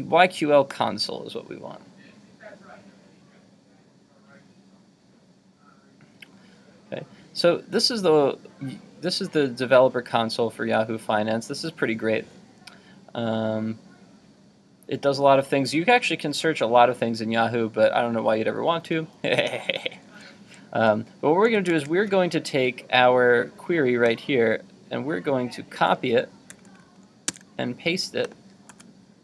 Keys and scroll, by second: 21.7 super+Tab, 26.5 super+c, 27.4 super+Tab, 28.7 super+v.